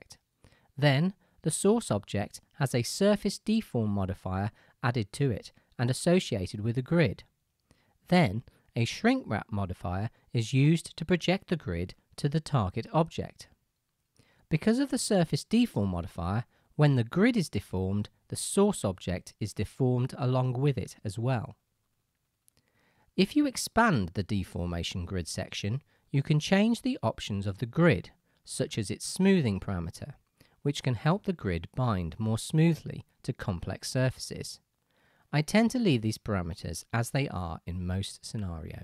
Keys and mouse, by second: 0.3-7.0 middle drag, 2.4-7.0 drag, 2.4-7.0 right drag, 7.6-22.1 drag, 23.3-38.8 middle drag.